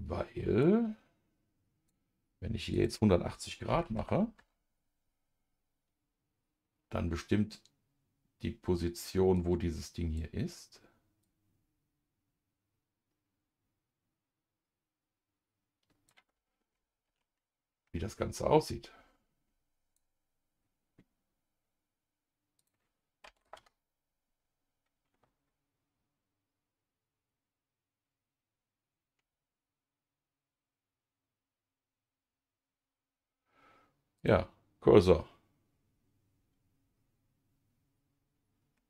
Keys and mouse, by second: 0.6-1.9 drag, 2.7-4.4 drag, 9.3 click, 11.2-16.1 drag, 17.0 ctrl+z, 18.6-20.0 drag, 22.6 click, 34.2 click.